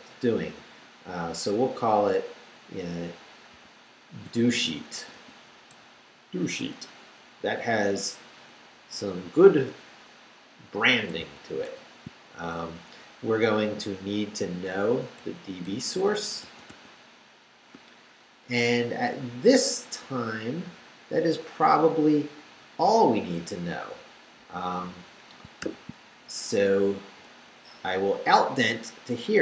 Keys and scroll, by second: 3.5-5.7 typing, 11.6 shift+9, 14.6-17.2 typing, 25.6 shift+o, 26.6 shift+Return, 27.4 BackSpace.